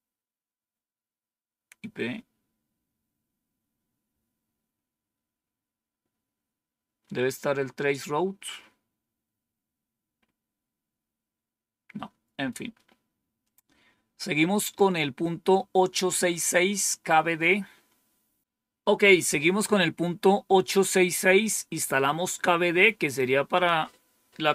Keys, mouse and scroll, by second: 0.4-2.0 scroll down 3, 2.0 scroll down 1, 5.1 scroll down 2, 6.9 scroll down 2, 8.5-9.2 scroll up 2, 9.2-13.3 scroll up 1, 13.3 click, 23.4 click.